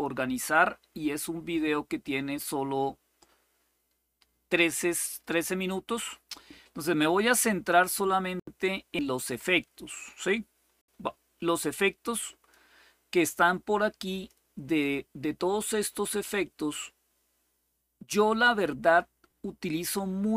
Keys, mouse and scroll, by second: 1.3-12.3 drag, 13.9 click, 16.0-17.9 drag.